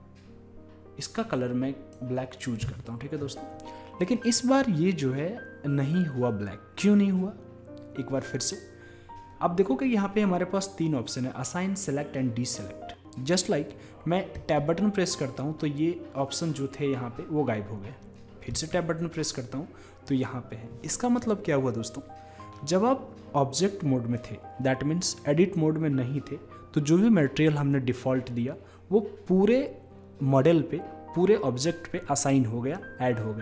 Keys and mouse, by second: 14.4 Tab.